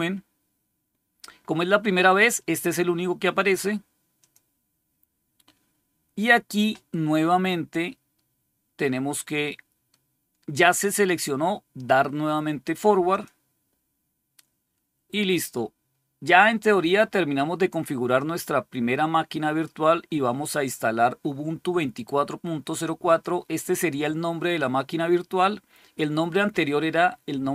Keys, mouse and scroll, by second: 4.0 click, 13.0 click, 22.9 click.